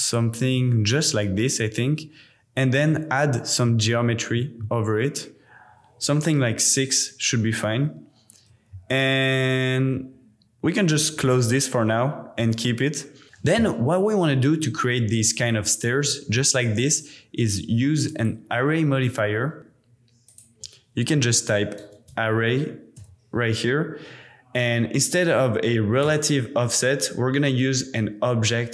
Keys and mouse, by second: 3.9 click, 11.1 click, 18.2-23.0 drag, 21.8 r, 26.0 click.